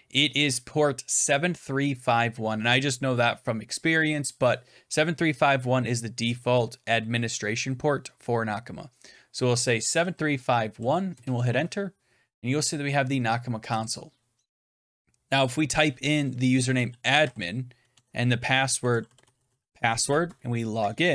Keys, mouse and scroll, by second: 9.4-11.1 typing, 13.8-18.8 drag, 16.2-19.4 typing, 17.8 Tab.